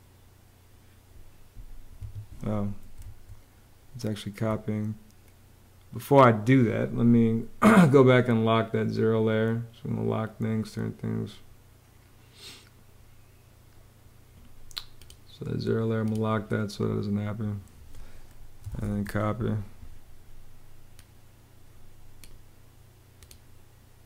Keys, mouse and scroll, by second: 2.8 super+z, 18.1-19.0 typing.